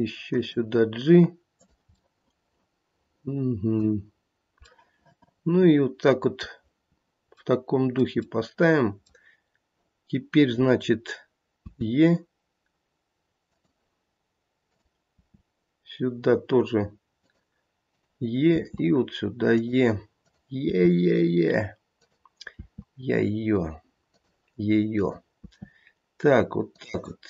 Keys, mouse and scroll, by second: 1.5 click, 2.0 middle click, 2.9 middle click, 3.6 middle click, 5.7 middle click, 7.4 middle click, 11.6 e, 14.7 click, 15.1 e, 17.8 click, 18.5 e, 20.2 click, 20.6 e, 22.5 e, 24.9 click, 25.4 e.